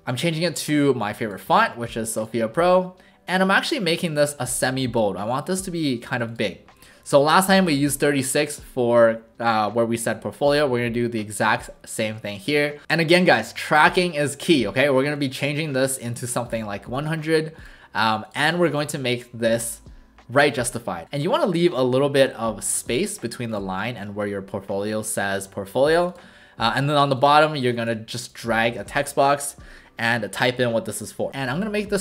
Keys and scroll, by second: 18.5 ctrl+a, 28.8 ctrl+alt+shift+a, 31.3 ctrl+a, 31.3 typing.